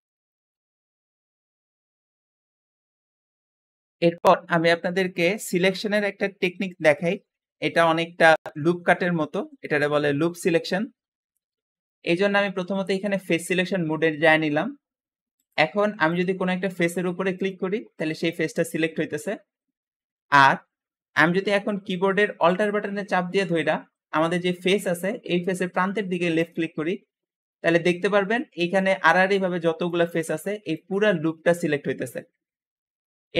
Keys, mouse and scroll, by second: 15.3 click, 16.0 click, 16.6 click, 17.2 click, 17.8 click, 18.4 click, 19.7 scroll up 1, 26.3 alt+click, 27.3-27.9 scroll down 2, 27.9 `.